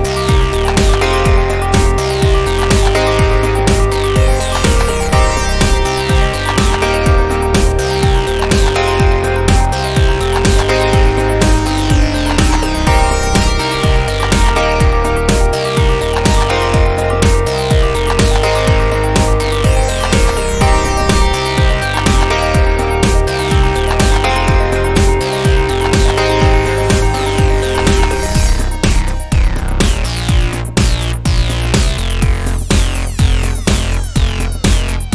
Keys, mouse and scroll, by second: 2.5 z, 3.1-5.8 middle drag, 5.7 Tab, 6.1 middle click, 7.0 click, 10.6 click, 15.7-26.5 middle drag, 26.5 right click, 28.4 alt+d, 30.2 click, 31.5 middle drag, 32.5-35.1 middle drag.